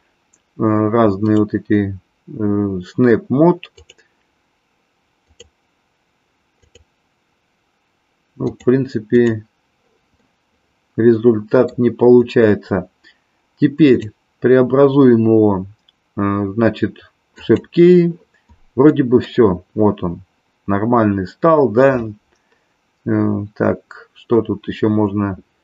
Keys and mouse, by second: 1.4-4.0 drag, 5.2-6.7 drag, 8.4-9.2 drag, 10.1-11.8 middle drag, 13.7-17.6 drag, 18.9 middle click.